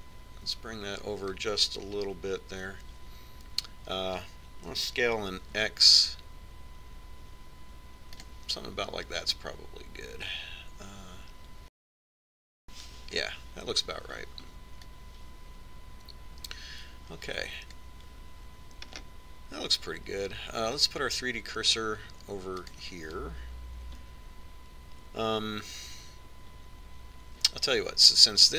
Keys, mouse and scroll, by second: 1.5-3.3 drag, 6.7 s, 11.3-13.0 drag, 15.8-17.6 drag, 19.9-21.9 middle drag, 23.7-28.5 drag.